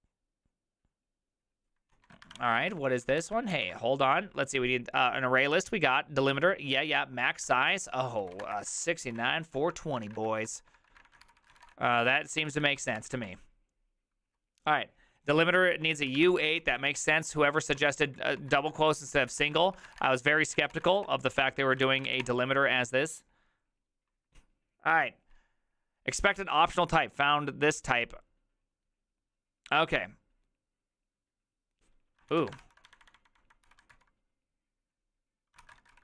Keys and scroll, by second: 1.9 ctrl+a, 2.0-3.7 typing, 7.4-12.3 typing, 12.7 ctrl+c, 12.9 Up, 13.1 Return, 15.9-21.0 typing, 16.3 ctrl+c, 20.7 Return, 20.8 ctrl+a, 21.3 ctrl+Up, 21.8 ctrl+c, 22.0 Up, 22.2 Return, 32.2-34.4 typing, 35.5-36.0 typing.